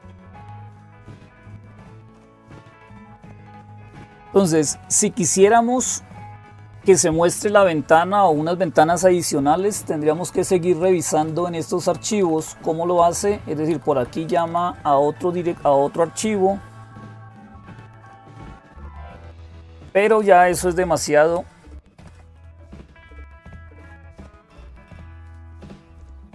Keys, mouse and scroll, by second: 0.0 click, 2.3-3.5 drag, 10.1 Up, 10.4 Up, 10.6 Up, 10.8 Up, 11.0 Up, 11.7 Up, 11.7 Down, 11.9 Down, 12.0 Down, 12.2 Down, 12.9 Up, 12.9 Down, 12.9 Right, 13.1 Right, 13.5 Left, 13.8 Left, 14.1 Right, 14.3 Right, 17.9 Down, 18.1 Down, 18.3 Down, 18.5 Down, 18.9 Down, 19.3 Down, 19.3 Down, 19.4 Down, 19.6 Down, 19.8 Down, 20.0 Down, 20.2 Down, 20.6 Down, 20.7 Down, 21.2 Up, 21.8 Down, 22.0 Down, 22.3 Down, 22.5 Down, 23.4-23.8 Down, 24.4 Down, 24.4 Up, 25.0 Up, 25.1 Up, 25.7 Up.